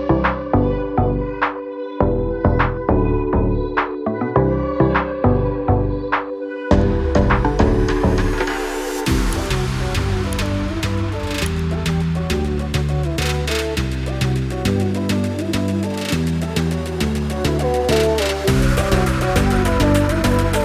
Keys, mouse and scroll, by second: 0.8 click, 2.2 scroll down 1, 4.8-5.3 scroll up 1, 5.4 scroll up 1, 6.7 click, 7.3 click, 8.7 click, 10.4 click, 11.1 ctrl+o, 11.4 scroll down 1, 13.6-14.0 scroll up 1, 15.1-15.5 scroll up 1, 15.7 click, 16.5 click, 18.4 F4, 19.0 click.